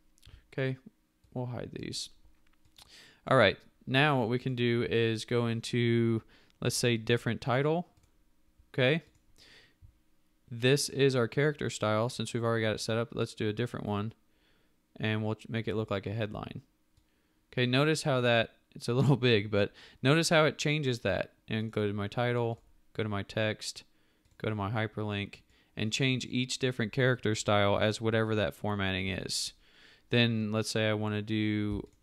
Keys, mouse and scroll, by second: 31.9 shift+click.